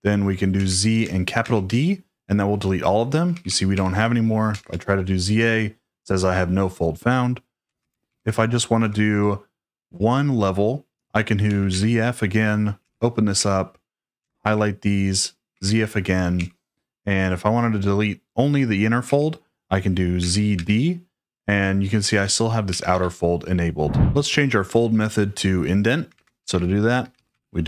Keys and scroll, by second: 0.5 z, 1.4 shift+d, 3.0-4.9 typing, 7.5-8.8 typing, 11.2-16.3 typing, 19.0 j, 20.1 z, 20.5 d, 21.9-24.3 typing, 25.9-27.6 typing.